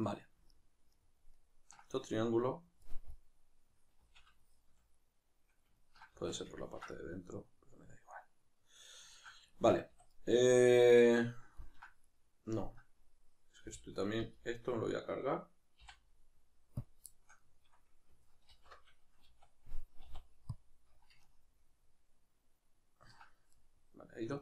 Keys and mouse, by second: 4.0 z, 6.1 z, 9.9 a, 12.0 right click, 12.8 right click, 13.6 l, 17.1-24.4 shift+middle drag, 18.5 alt+h.